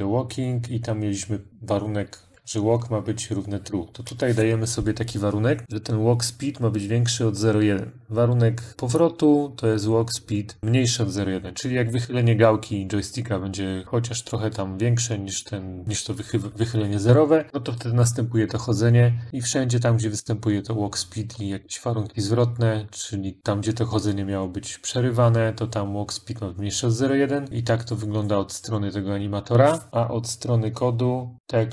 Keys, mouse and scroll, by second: 8.8 click, 19.2 click, 21.5 middle click, 27.5 click, 27.6 click, 29.2 middle click, 31.3 click.